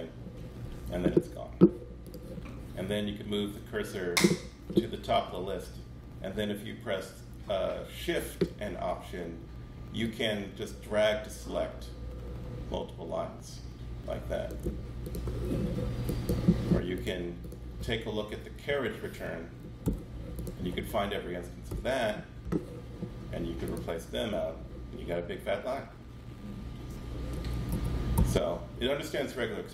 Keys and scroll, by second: 3.1 super+BackSpace, 18.7 shift+BackSpace, 19.8 super+c, 20.7 super+a, 21.7 super+v, 27.7 super+z, 28.1 super+z, 28.8 super+z.